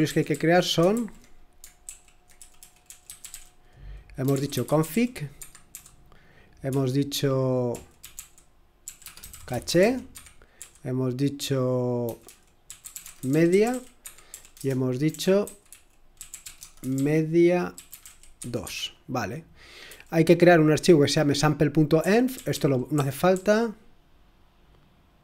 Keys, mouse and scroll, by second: 0.0-10.6 typing, 11.7-20.3 typing, 21.7-23.3 typing.